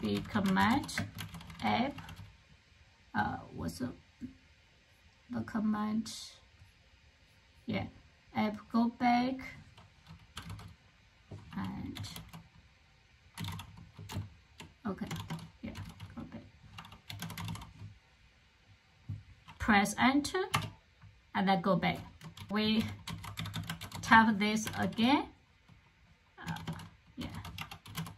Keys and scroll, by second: 0.0-1.8 typing, 9.9-17.8 typing, 20.4 Return, 22.0-25.0 typing, 26.4-28.1 typing.